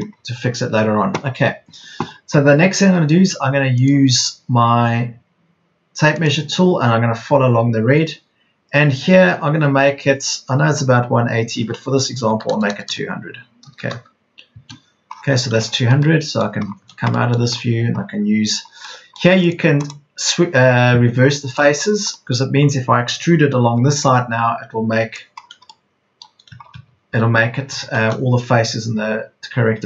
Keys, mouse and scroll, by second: 12.2 KP_2, 12.5 KP_0, 13.7 BackSpace, 17.0 space, 17.3 Escape, 23.5 p, 26.5 Escape.